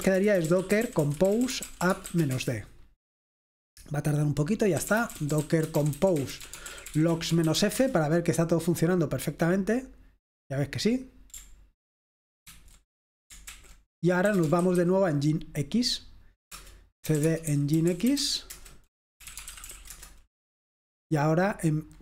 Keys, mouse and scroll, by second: 0.0-2.7 typing, 4.7-8.1 typing, 12.6 ctrl+c, 13.6 ctrl+l, 14.1-15.3 typing, 16.6 Return, 17.0-22.0 typing.